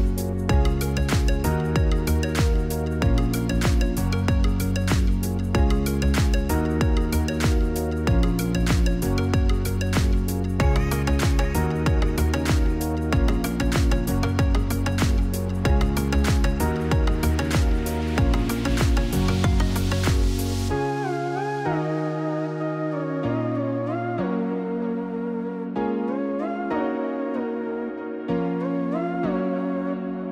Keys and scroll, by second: 15.7-16.9 typing, 26.2-27.8 typing, 29.2 typing.